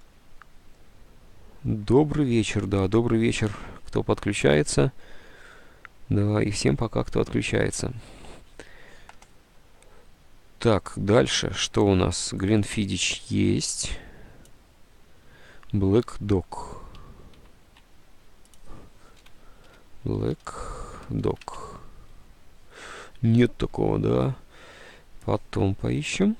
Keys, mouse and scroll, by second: 17.5 alt+Tab, 19.0-21.9 typing, 23.9 alt+Tab.